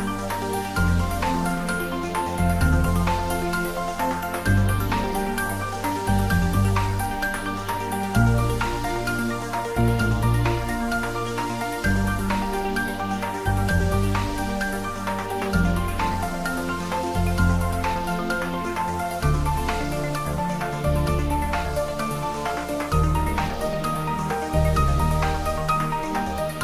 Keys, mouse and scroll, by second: 0.3-0.7 scroll down 1, 3.0-4.1 scroll up 1, 5.8 scroll up 1, 5.9 click, 6.6-9.6 drag, 9.7 click, 11.8 alt+shift+click, 14.7 alt+shift+click, 17.5 ctrl+z, 20.4 alt+shift+click, 23.0 alt+shift+click.